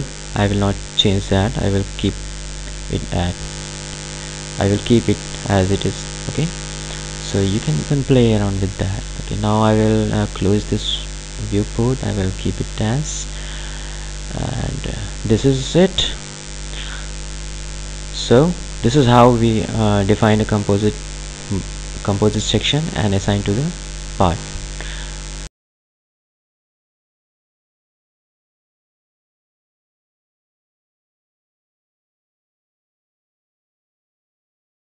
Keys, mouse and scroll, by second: 0.4 click, 7.1 click, 10.9 click.